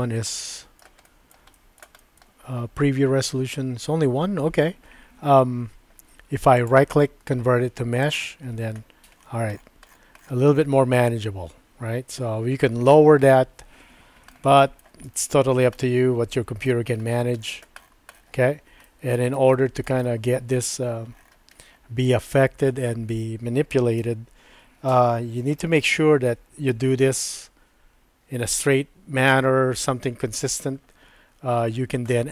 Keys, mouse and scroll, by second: 0.5 shift+middle click, 1.0 shift+middle click, 1.5 shift+middle click, 2.0 shift+middle click, 6.5-8.1 right drag, 8.6 Tab, 11.8 Tab, 14.3 shift+middle click, 15.2 shift+middle click, 15.7 middle click, 18.8 middle click, 19.5 shift+middle click, 20.1 middle click, 24.0 KP_1, 25.9 shift+middle click.